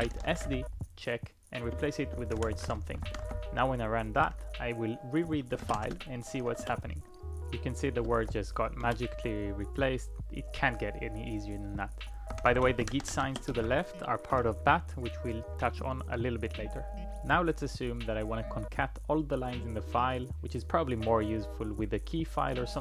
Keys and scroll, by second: 0.0-3.8 typing, 5.2-5.9 typing, 5.9 Tab, 6.6 Return, 8.2 ctrl+p, 8.3 ctrl+p, 8.9 Return, 12.1-13.4 typing, 13.5 Tab, 14.4 Return.